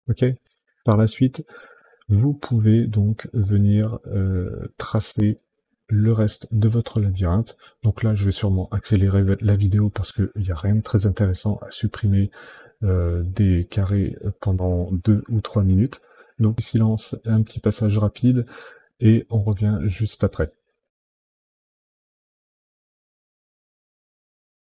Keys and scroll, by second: 5.1 Delete, 6.0 Delete, 20.4 Delete, 21.1 Delete, 21.6 Delete, 22.1 Delete, 22.7 Delete, 23.2 Delete, 23.7 Delete, 24.2 Delete.